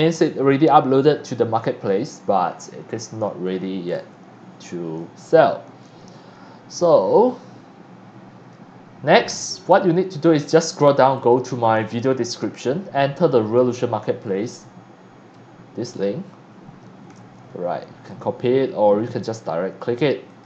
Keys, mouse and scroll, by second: 7.1 click, 10.4 click, 11.1 click, 12.3 click, 14.2-15.3 drag, 17.1 ctrl+c, 18.1 click, 20.3 click.